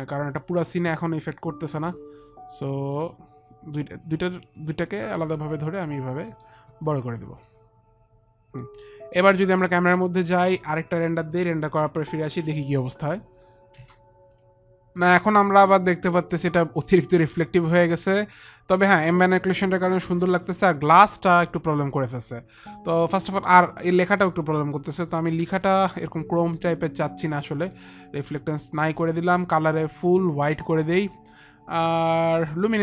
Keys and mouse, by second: 0.9 alt+middle click, 2.9 click, 4.5 click, 6.3 click, 7.5 click, 9.7 click, 13.7 ctrl+r, 25.6 click, 27.7 click, 29.8 click, 30.7 click, 31.8 click.